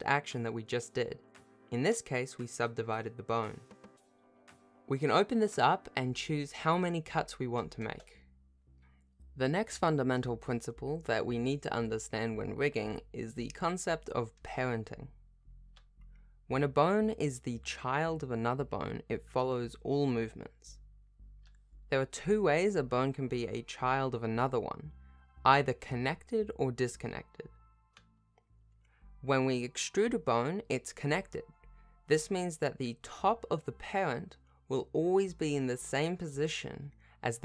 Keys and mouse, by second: 2.1-6.1 drag, 7.1 click, 11.2 ctrl+Tab, 12.4 r, 16.1 g, 17.4 s, 18.8 alt+g, 19.1 alt+r, 19.4 alt+e, 20.1 alt+s, 20.8 Tab, 21.5 click, 23.3 alt+p, 24.6 r, 25.8 g, 26.8 ctrl+Tab, 27.1 r, 30.7 Tab, 31.3 e, 33.0 click, 34.0 g.